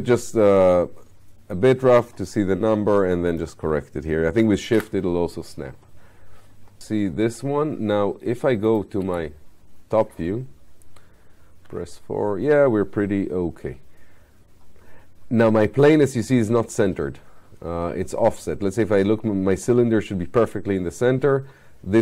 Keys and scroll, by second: 4.4 9, 9.1 space.